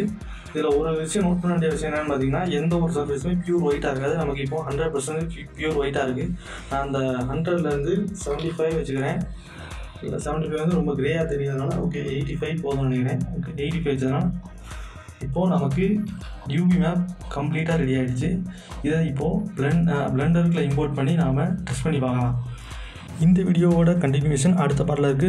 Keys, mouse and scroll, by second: 6.1 click, 6.1-8.9 drag, 10.5-13.3 drag, 14.4 click, 16.4 right click, 16.7 click, 16.8 click, 17.3 right click, 17.8 click, 19.9 right click, 20.3 click, 24.0 s, 24.5 ctrl+shift+s.